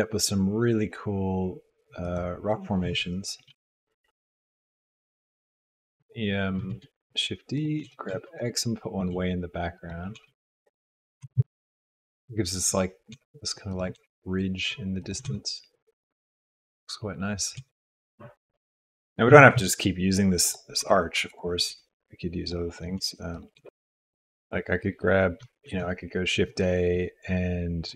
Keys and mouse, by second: 3.5 s, 6.1 click, 6.9 shift+d, 7.8 g, 10.1 g, 11.2 r, 11.4 s, 13.1 g, 13.9 r, 15.2 g, 17.6 g, 18.7 shift+d, 18.7 r, 19.3 s, 20.8 g, 21.6 r, 22.9 r, 23.5 g, 23.6 g, 25.6 shift+a.